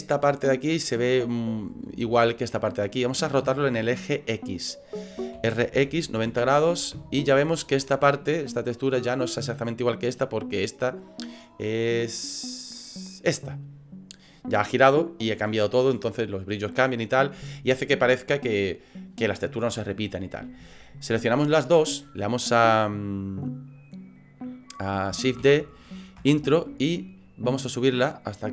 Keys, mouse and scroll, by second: 5.4 r, 21.2 shift+right click, 25.4 shift+d, 27.4 click.